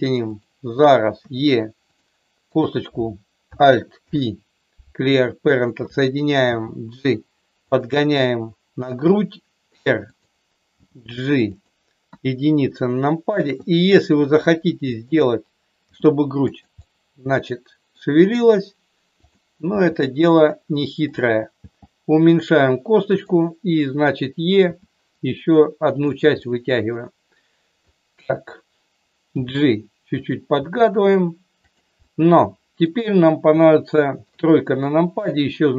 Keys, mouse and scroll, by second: 1.2 e, 1.8 click, 2.5 click, 3.9 alt+p, 6.4 g, 7.5 click, 9.2 r, 10.0 click, 10.7 g, 11.5 click, 12.0 KP_1, 13.7 click, 15.8 g, 16.4 click, 16.8-17.9 middle drag, 19.1 click, 19.7 g, 20.3 click, 21.1 click, 21.5 g, 23.2 click, 24.7 e, 26.0 click, 26.3-27.9 middle drag, 29.3 g, 30.2 click, 30.5 g, 31.9-32.9 middle drag, 33.9 middle click, 34.3 KP_3.